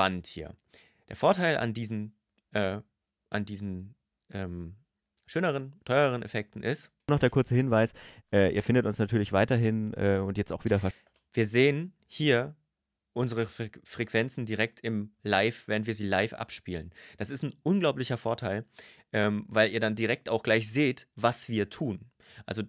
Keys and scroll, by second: 6.8 space, 10.7 space.